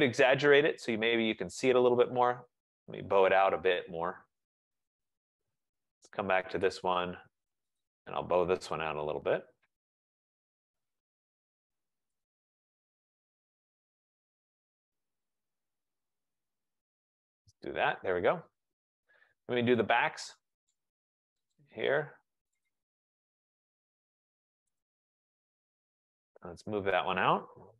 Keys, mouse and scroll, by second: 0.9-1.6 typing, 2.1 click, 4.6 middle click, 4.7-5.5 scroll, 6.7 click, 7.9 click, 8.9-9.2 typing, 12.3 click, 14.4-14.9 scroll, 17.1 click, 21.5 right click, 21.7 click, 22.8 right click, 24.9 right click, 25.2 click, 25.6-26.6 scroll, 26.6-27.4 scroll.